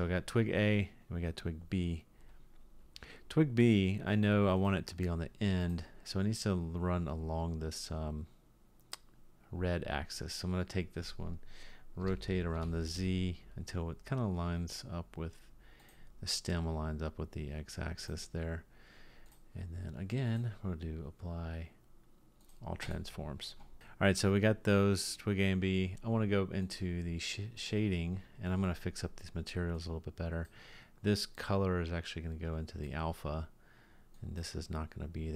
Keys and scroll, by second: 12.0 r.